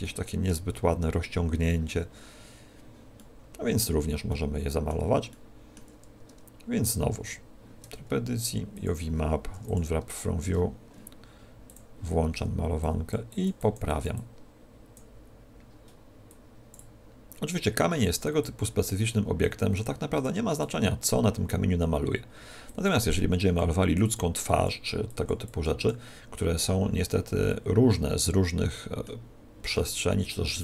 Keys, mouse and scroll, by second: 0.7-1.3 scroll up 3, 2.2-2.6 scroll down 4, 3.1 middle click, 4.2 middle click, 5.2 middle click, 7.9 Tab, 8.6 click, 9.4 u, 10.4 Tab, 11.6 click, 12.8 click, 17.3 click, 22.7 click, 23.4 click, 24.5 click, 24.7 click, 25.7 click, 26.3 click, 26.8 click, 27.4 middle click, 29.7 middle click.